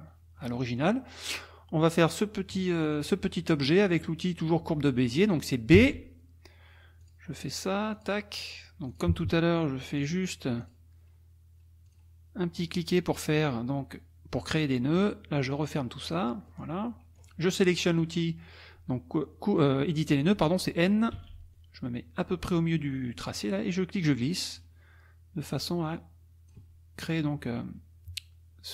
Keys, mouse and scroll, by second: 0.4 click, 2.2 click, 5.7 b, 7.0 click, 8.0 click, 8.9 click, 10.0 click, 10.6 click, 11.9 click, 12.6 click, 14.3 click, 15.0 click, 16.1 click, 16.5-17.4 scroll up 2, 21.2 n, 23.4 click, 25.5-26.7 drag.